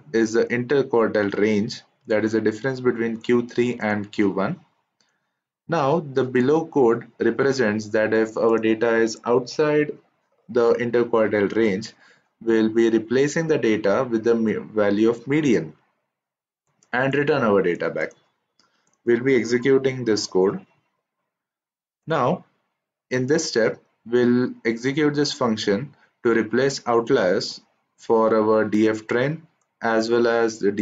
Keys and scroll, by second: 20.2 shift+Return.